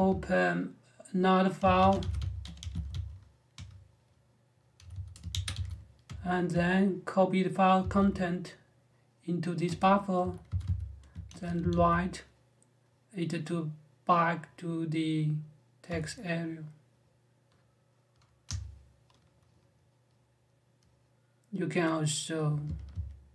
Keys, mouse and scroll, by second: 1.1-3.2 typing, 3.3 Return, 4.4-5.8 typing, 7.6 shift+e, 9.4-12.0 typing, 18.2 Return.